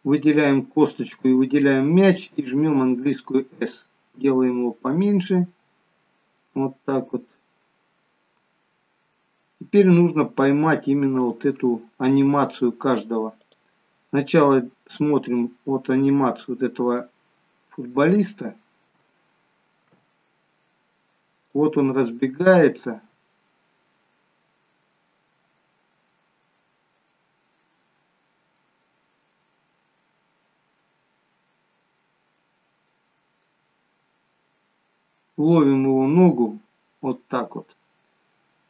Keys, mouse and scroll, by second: 0.3-0.9 scroll up 2, 0.9-1.4 scroll down 1, 2.6 s, 8.7-11.2 scroll down 1, 11.2 click, 11.2-11.8 scroll down 1, 17.4-18.0 scroll up 4, 18.0 shift+middle click, 19.3-20.0 scroll down 1, 22.2 click, 38.4-38.6 scroll up 1.